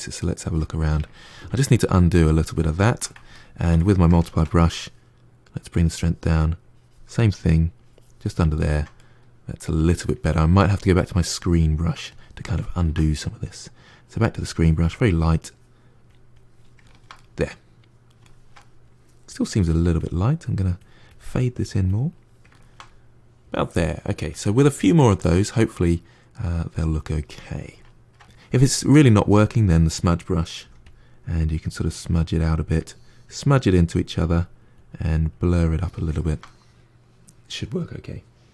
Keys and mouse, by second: 1.0 ctrl+z, 1.3-2.6 ctrl+z, 3.2-5.4 ctrl+middle drag, 5.4-8.4 drag, 8.4-10.8 ctrl+middle drag, 10.8-12.3 drag, 12.3-13.9 ctrl+middle drag, 13.9-16.7 drag, 16.7-19.2 ctrl+middle drag, 19.2-22.4 drag, 22.4-29.3 ctrl+middle drag, 29.3-30.5 drag, 30.5 f, 31.1-35.6 drag, 36.0-38.5 ctrl+middle drag.